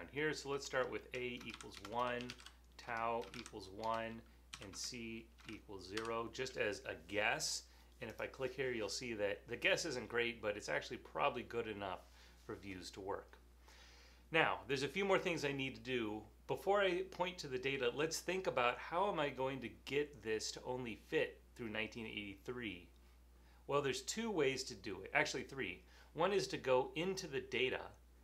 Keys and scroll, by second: 0.0-6.0 typing.